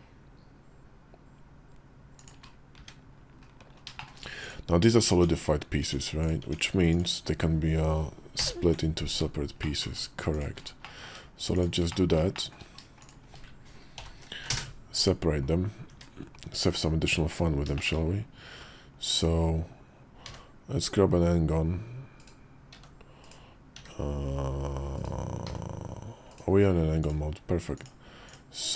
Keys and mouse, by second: 3.3 `, 3.3 KP_5, 3.8 shift+middle click, 4.3 click, 5.0 Tab, 5.7 Tab, 6.3 Tab, 6.7 click, 8.3 ctrl+l, 9.6 middle click, 10.7 middle click, 11.4 shift+click, 11.8 middle click, 12.2 shift+click, 13.8 ctrl+l, 14.2 p, 15.7 Tab, 16.3 Tab, 16.3 `, 16.5 KP_5, 16.9 KP_5, 17.6 shift+click, 20.1 d, 22.6 s, 23.6 d, 25.3 d, 27.6 click, 28.1 click.